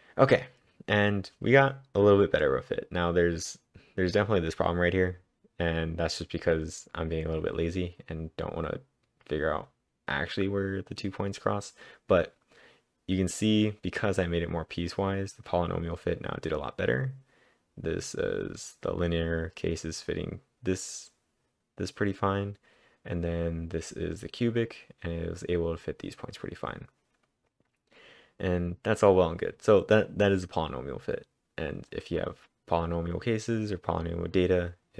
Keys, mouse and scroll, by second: 2.8-3.5 typing, 29.5-34.9 drag.